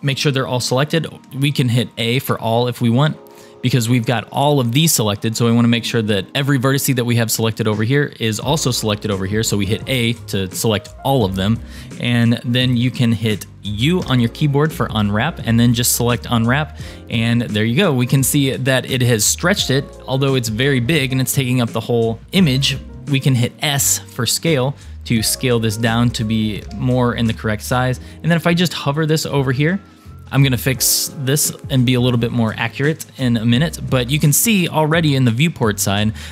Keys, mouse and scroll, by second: 2.2 a, 3.6 scroll down 1, 9.9 a, 14.0 u, 17.6-18.0 scroll up 1, 18.0-20.7 scroll down 2, 24.3 s, 26.7 g, 35.1-35.4 scroll up 2.